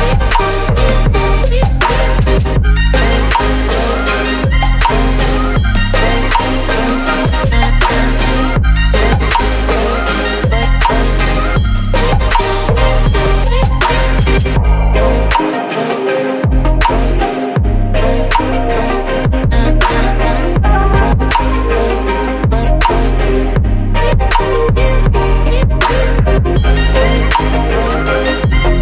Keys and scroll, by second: 11.6 ctrl+c, 14.0 ctrl+v, 17.5 Return, 19.4-20.5 typing.